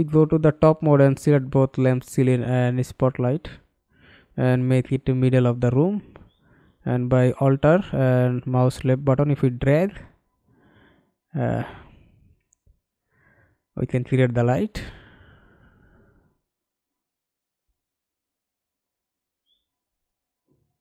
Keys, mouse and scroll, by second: 0.1-0.6 scroll down 7, 0.7 right click, 1.1-1.6 scroll up 5, 1.7 right click, 3.1-3.5 scroll up 5, 3.5 right click, 10.3 alt+click, 12.4 alt+click, 12.9 alt+click, 15.5 scroll down 3, 15.8 scroll up 2, 19.4 middle click, 20.4 alt+right click.